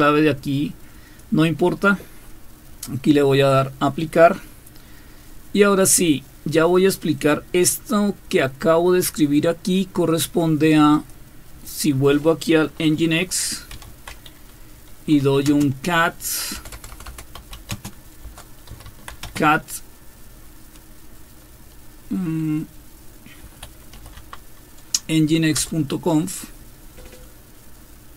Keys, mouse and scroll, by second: 0.0-1.2 drag, 4.0 click, 7.2-9.2 drag, 10.9 click, 11.7 click, 13.5-15.5 typing, 16.5-19.6 typing, 23.4-24.1 typing, 25.5 typing.